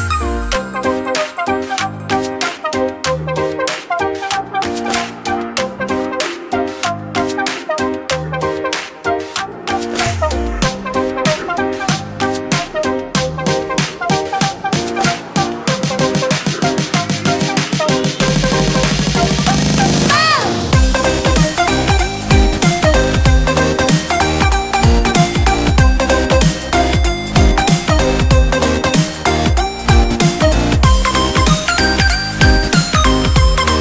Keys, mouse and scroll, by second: 4.9-8.1 drag, 8.2-9.8 scroll down 21, 9.8-11.1 scroll up 20, 14.0 ctrl+click, 16.8 ctrl+j, 19.3 click, 20.9 Delete, 22.3 click, 23.1-26.1 middle drag, 28.0-31.1 drag, 31.3-32.3 drag.